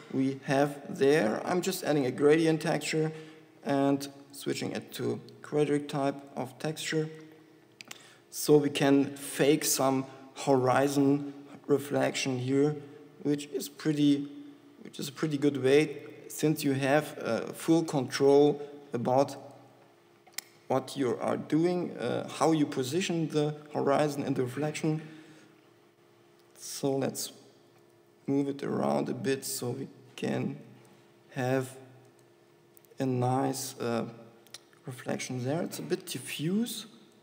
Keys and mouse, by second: 3.9 e, 4.0 e, 4.7-7.2 drag, 8.9 s, 11.1 click, 12.5 r, 15.5-17.4 drag, 15.9 s, 19.7-21.5 drag, 23.5 z, 25.6 r, 28.0 s, 36.2-37.2 drag.